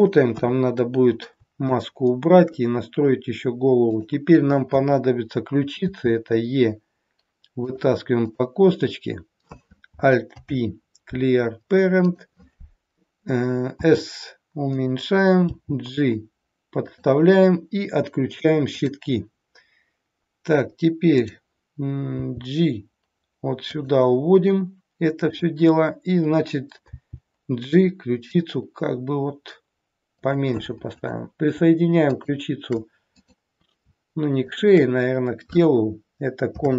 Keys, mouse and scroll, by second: 0.4 KP_1, 1.0-1.4 scroll down 2, 1.6 shift+middle click, 3.9 click, 5.9 e, 8.3 click, 8.6-9.8 scroll up 4, 10.4 alt+p, 13.8 s, 15.5 g, 18.8 click, 21.1 click, 22.1 g, 25.1 click, 27.0 g, 30.9 click, 32.0 shift+click, 33.1 click, 34.4 shift+click, 36.5 ctrl+p.